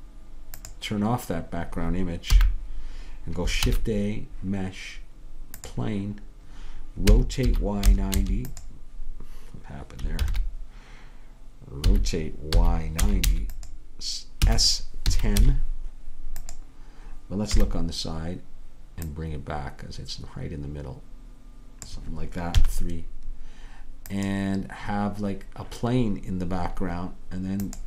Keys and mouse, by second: 2.4 n, 3.7 shift+a, 7.2 r, 10.3 ctrl+z, 11.9 r, 14.5 s, 17.6 KP_1, 22.6 KP_3.